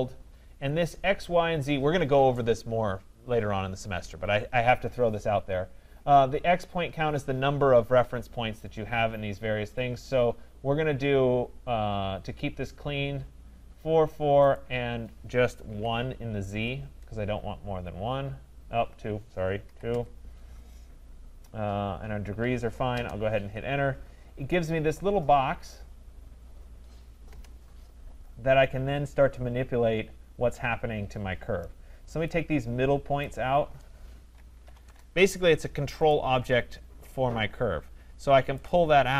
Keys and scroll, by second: 16.5 Return, 34.8 Return.